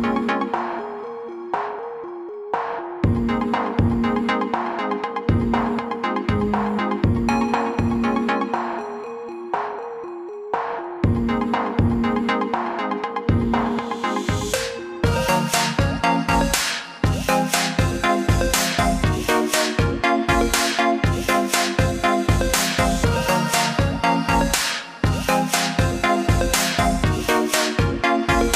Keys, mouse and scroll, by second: 10.2 click, 16.9-17.4 scroll up 2, 17.8-19.5 scroll up 1, 19.5 click.